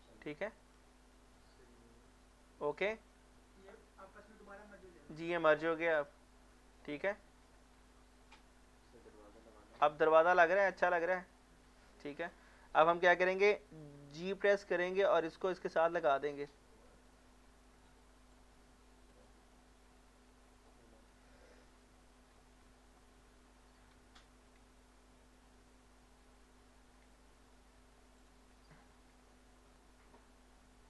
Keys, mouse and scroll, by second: 0.1 middle click, 0.9 shift+middle click, 2.4-6.5 middle drag, 6.5 middle click, 6.8 scroll down 1, 7.2 middle click, 7.7 scroll up 1, 8.1 middle click, 9.1 shift+middle click, 12.6-14.3 scroll up 1, 14.3 g, 16.4 click, 17.0 middle click, 17.5 shift+middle click, 18.3 click, 19.5 shift+middle click, 20.0 scroll up 1, 20.5 shift+middle click, 20.8 scroll up 1, 22.3 middle click, 22.4 middle click, 22.6 scroll up 1, 23.0 middle click, 24.0 z, 24.4 z, 24.5 z, 24.5 z, 26.6 g, 27.0 g, 28.2 click, 28.5 scroll down 1.